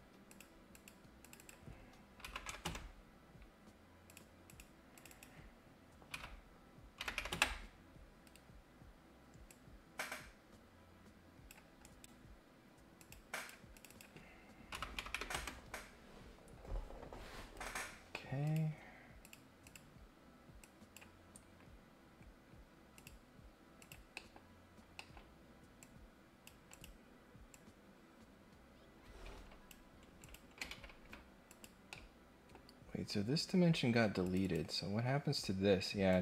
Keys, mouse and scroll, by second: 0.3 click, 0.7 click, 1.2 click, 4.1 click, 4.4 click, 4.9 click, 5.1 click, 8.2 Escape, 9.4-11.5 drag, 11.8 right click, 12.9 click, 13.3 click, 13.7 click, 17.5 Escape, 18.4 click, 19.2 click, 19.6 click, 20.6 click, 22.9 click, 23.7 click, 24.1 middle click, 24.9 middle click, 25.8 click, 26.7 click, 27.4-29.7 drag, 30.2 click, 31.4 click, 31.9 middle click, 34.2 click, 36.1 click.